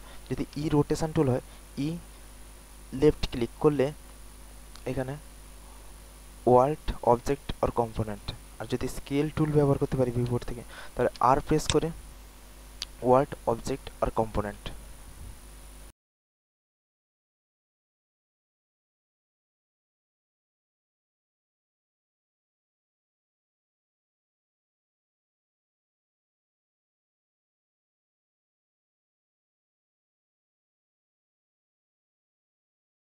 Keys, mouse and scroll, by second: 0.6-2.0 typing, 1.7 click, 4.4 typing, 11.3-12.8 typing, 11.6 click, 14.0-14.4 typing, 14.4 click.